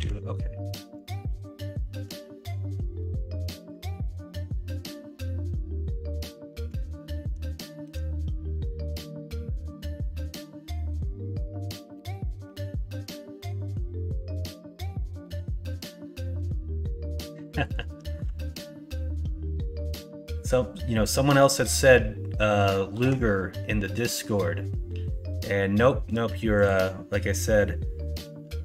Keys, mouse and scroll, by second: 2.1 ctrl+r, 7.8 ctrl+b, 11.8 ctrl+z, 12.4 s, 22.9 ctrl+b.